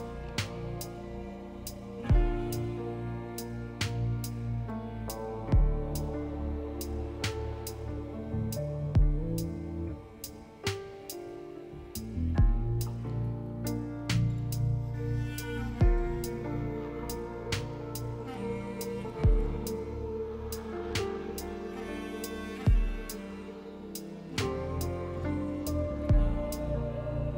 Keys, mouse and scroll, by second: 18.8 F4.